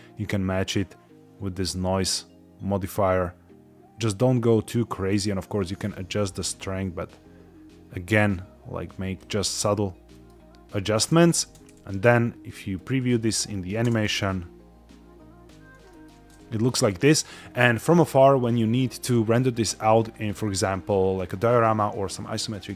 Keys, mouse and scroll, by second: 0.7-4.7 drag, 5.1-9.1 drag, 9.5-10.0 scroll down 1, 10.0 middle click, 11.0 space, 11.2 z, 12.6 click, 13.2 middle click, 13.8 space, 15.4 scroll up 1, 15.8 shift+middle click.